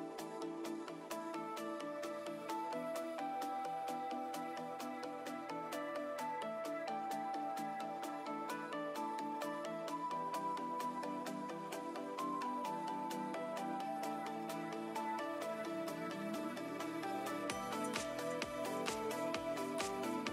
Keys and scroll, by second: 11.6 z.